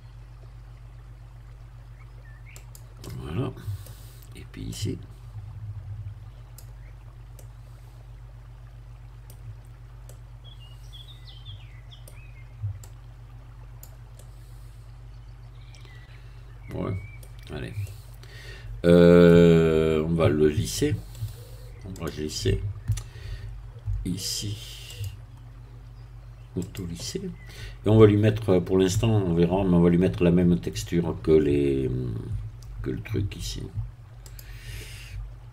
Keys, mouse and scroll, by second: 2.6 click, 3.0-4.3 middle drag, 4.8-7.0 drag, 7.0 scroll up 1, 7.4-9.5 middle drag, 9.7 scroll down 2, 10.1-12.2 middle drag, 12.8-14.0 drag, 14.2-17.2 middle drag, 17.2-17.8 scroll down 1, 17.8-19.4 middle drag, 21.2 right click, 22.0 click, 24.9 click, 26.6 click, 34.2 click.